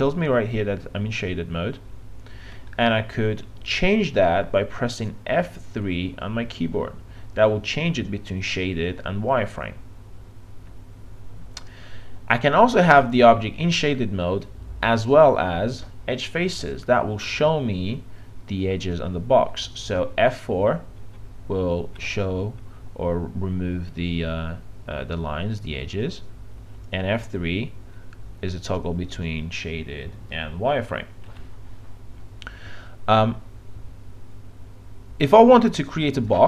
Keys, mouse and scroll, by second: 3.6 F3, 11.2 F3, 15.2 F4, 21.0 F4, 21.8 F4, 22.4 F4, 23.6 F4, 27.2 F3, 27.7 F3, 29.8 F3, 35.8 click.